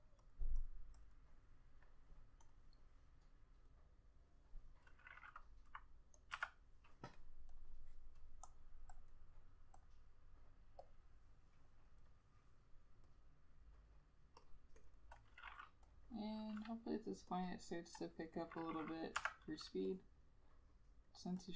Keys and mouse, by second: 14.9 double click, 19.3 F6.